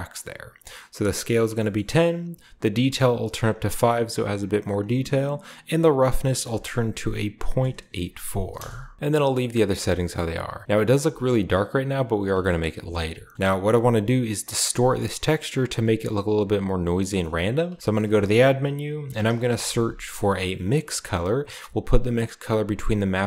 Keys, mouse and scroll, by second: 1.5 middle click, 2.8 click, 3.3 typing, 3.4 click, 4.7-6.1 scroll up 1, 6.2 click, 7.4-8.4 typing, 8.5 Return, 9.0-9.6 scroll down 2, 9.6 scroll down 1, 9.9-12.0 shift+middle drag, 11.0-12.0 scroll up 2, 12.0 scroll down 2, 12.3-13.2 shift+scroll up 2, 12.6 shift+middle click, 13.2 scroll down 2, 13.6-16.9 middle drag, 17.2-19.2 middle drag, 17.7 shift+a, 17.8-19.2 shift+drag, 19.0-19.4 typing, 20.8 click, 22.9 click.